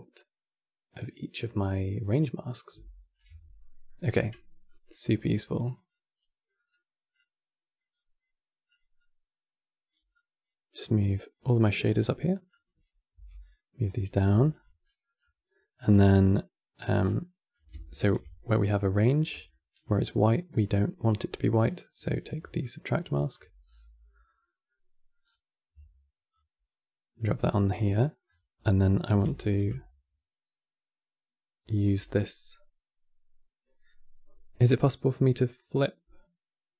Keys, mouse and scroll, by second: 3.6 middle click, 4.4 click, 5.6 click, 6.4-7.7 drag, 8.4 click, 8.7 click, 9.8 click, 10.4 click, 11.2-11.6 middle drag, 11.6-12.2 scroll down 5, 12.2 click, 12.8 g, 13.6 click, 14.0 g, 14.5 middle click, 14.9-15.2 scroll up 6, 15.2 middle click, 15.6-15.9 scroll up 9, 15.9 middle click, 16.7 scroll down 7, 16.9 middle click, 17.6 ctrl+shift+click, 18.8-20.4 middle drag, 20.4-20.7 scroll up 7, 21.4 click, 22.3-23.0 alt+drag, 23.3-23.8 scroll down 7, 23.8-24.9 middle drag, 24.9-26.0 scroll down 4, 26.0-27.6 alt+drag, 27.6 middle click, 28.0-28.3 scroll up 7, 28.3-29.1 middle drag, 29.1 ctrl+shift+click.